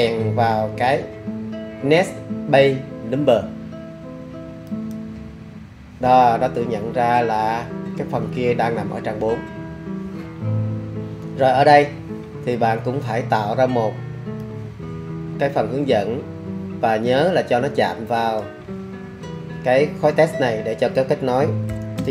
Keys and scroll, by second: 19.8-22.1 typing.